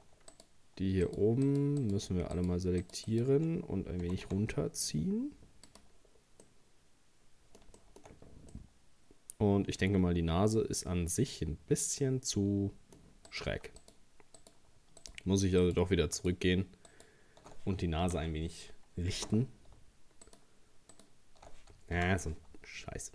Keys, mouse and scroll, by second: 0.3 right click, 1.1 shift+right click, 1.5 shift+right click, 1.8 shift+right click, 2.4 shift+right click, 2.8 shift+right click, 3.1 shift+right click, 4.1 g, 6.1 scroll down 2, 6.5-8.2 middle drag, 8.2-8.5 scroll up 1, 8.5-11.6 middle drag, 13.3 right click, 13.8 alt+shift+right click, 14.4 alt+shift+right click, 15.0 alt+shift+right click, 15.6 alt+shift+right click, 16.2 alt+shift+right click, 16.9 alt+shift+right click, 18.0 ctrl+z, 20.3 alt+shift+right click, 20.9 alt+shift+right click, 22.0 ctrl+z.